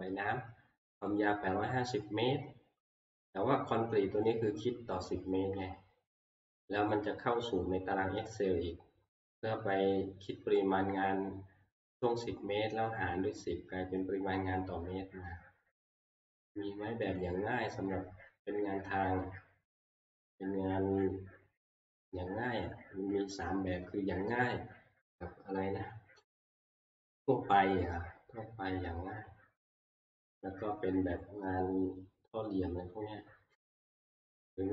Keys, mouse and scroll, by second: 1.1 click, 17.2 click, 18.4 middle click, 18.4 middle click, 18.5 middle click, 18.5-19.6 scroll, 21.0-22.6 middle click, 21.0 click, 21.5-22.6 scroll, 23.7 shift+middle click, 25.8 scroll.